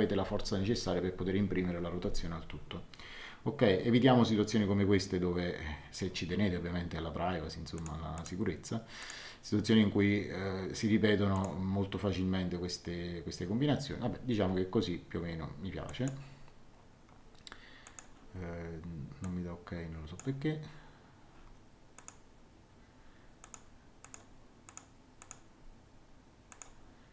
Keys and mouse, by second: 7.7 click, 11.3 click, 15.8 click, 17.8 click, 19.2 click, 21.9 click, 23.4 click, 26.5 click.